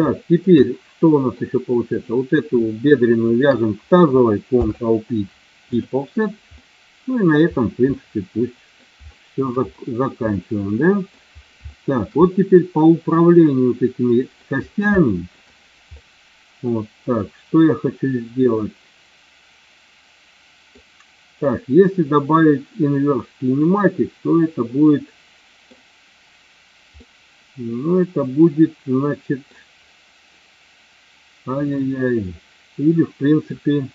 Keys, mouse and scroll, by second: 0.5 middle click, 1.9 click, 3.2 shift+click, 4.4 ctrl+p, 6.4 middle click, 7.9 middle click, 9.1 shift+middle click, 10.3 middle click, 11.5 shift+middle click, 12.2-14.3 middle drag, 14.9 shift+middle click, 15.9-20.7 middle drag, 21.4-25.7 middle drag, 26.9 middle click, 27.3-29.3 middle drag, 31.6-33.4 middle drag.